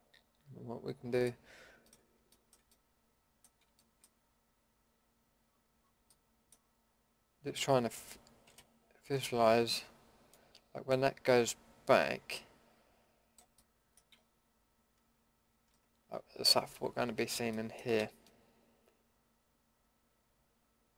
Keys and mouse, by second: 1.2 middle drag, 2.4-2.9 middle drag, 3.0 middle click, 5.4-6.1 middle drag, 6.2 middle click, 8.5 l, 17.0 ctrl+z, 17.5 middle drag, 18.0 a.